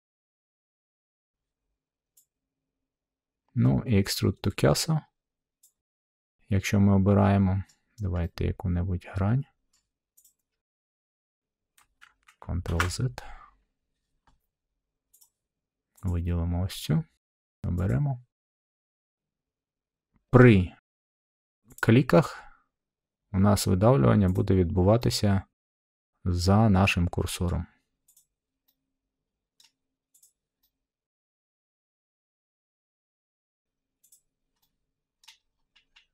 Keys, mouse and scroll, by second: 0.6 middle click, 5.6-6.7 drag, 7.6-8.6 middle drag, 9.7 middle click, 10.2 click, 12.6 ctrl+z, 15.1 click, 16.0 click, 17.8-19.0 drag, 20.3-21.4 middle drag, 21.7-22.9 drag, 24.3-25.5 drag, 27.4 middle click, 28.1 click, 29.5 middle click, 30.1 click, 31.6 middle click, 32.2 click, 32.9 middle click, 34.1 click, 35.2 middle click, 35.4 middle click, 35.4-35.9 scroll.